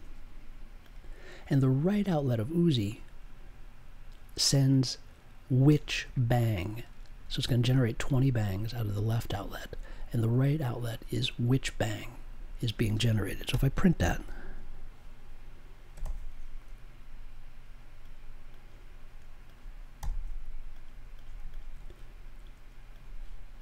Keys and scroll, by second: 13.5 n, 15.6-16.5 typing, 19.9 b.